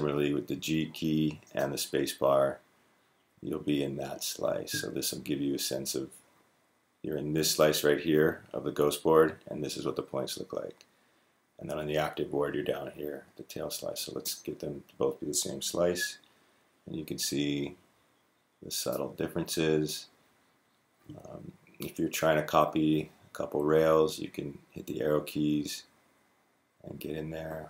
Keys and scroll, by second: 0.4-1.2 g, 1.4 g, 3.7-6.1 typing, 13.3-13.9 typing, 16.8-20.9 typing, 21.9-25.5 typing, 23.2 Right, 23.4 Right, 23.7 Right, 23.8 Right, 24.0 Right, 24.1 Right, 24.3 Right, 24.4 Right, 24.7 Right, 24.8 Right, 25.0 Right, 25.1 Right, 25.6 Right, 25.9 Right.